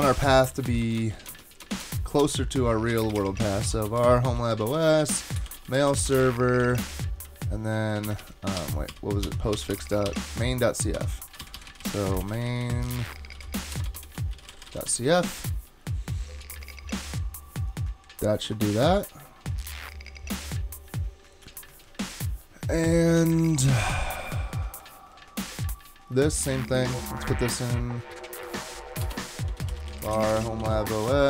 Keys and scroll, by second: 0.6 alt+BackSpace, 0.8 alt+BackSpace, 1.0 alt+BackSpace, 2.8-7.1 typing, 8.0 super+z, 8.2 super+z, 8.6 super+z, 11.4 shift+super+z, 11.5 shift+super+z, 13.1-15.4 typing, 29.0-31.2 typing.